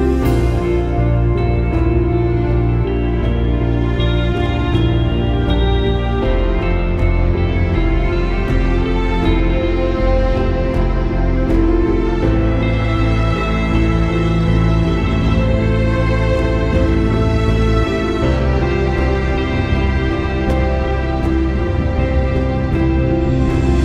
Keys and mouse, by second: 0.6-2.3 drag, 2.6 click, 3.7 click, 5.2 click, 6.1 click, 8.2 click, 9.7 click, 10.6 click, 11.4 space, 11.5 click, 11.7 space, 12.2 click, 12.4 space, 12.7 click, 15.1 click, 17.1-23.8 drag.